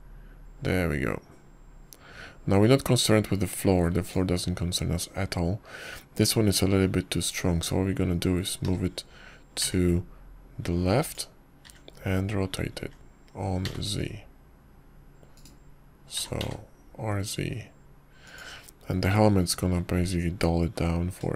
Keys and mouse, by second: 0.7-6.0 drag, 10.5 g, 13.5 r, 18.0 r.